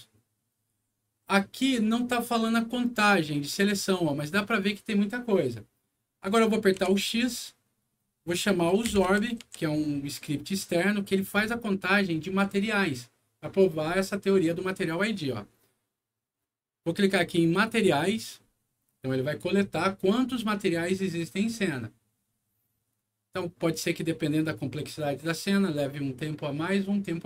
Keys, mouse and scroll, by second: 6.7 x, 8.4-9.9 typing, 11.3 click, 17.4 click.